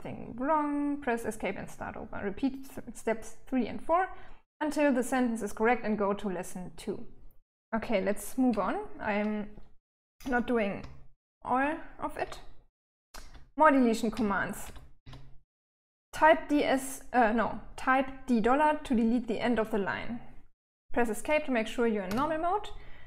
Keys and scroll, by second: 9.7-14.4 typing, 21.4 Escape.